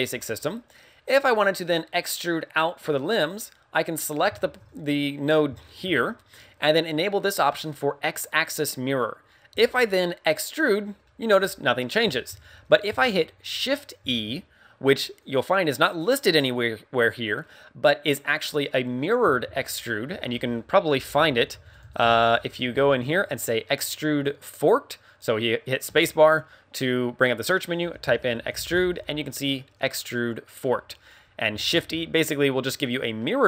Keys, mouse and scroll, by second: 3.9 right click, 4.3 shift+middle click, 5.0-5.4 scroll up 2, 5.5 shift+middle click, 8.4 click, 9.5 e, 10.7 click, 11.0 middle click, 12.3 ctrl+z, 14.0 shift+e, 15.3 click, 17.3 middle click, 18.4 middle click, 19.4 ctrl+z, 20.3 space.